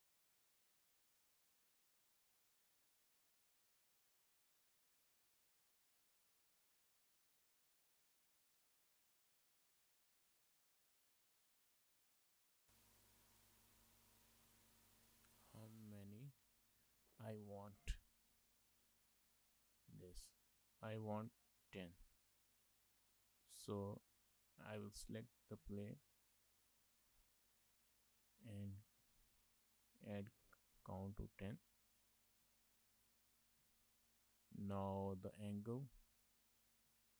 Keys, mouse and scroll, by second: 2.4-2.7 scroll down 2, 2.7 Tab, 3.3 shift+middle click, 3.3 middle click, 4.3 scroll down 2, 4.6 shift+middle click, 4.9 middle click, 9.7 click, 10.3 click, 14.1 click, 16.9 middle click, 18.7-19.1 scroll down 3, 19.1 shift+middle click, 19.3 middle click, 20.3 shift+middle click, 20.6 middle click, 25.5 click, 27.6 click, 29.5 KP_0, 32.6 shift+middle click, 32.9 middle click, 33.7 shift+middle click, 33.9 middle click, 34.3 middle click, 35.9 shift+middle click, 36.2 middle click.